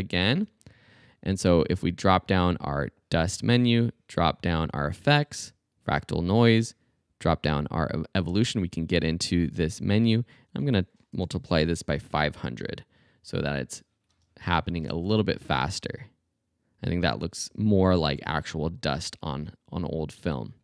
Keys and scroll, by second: 0.5 alt+super+z, 11.2 BackSpace, 11.7 5, 14.1 space.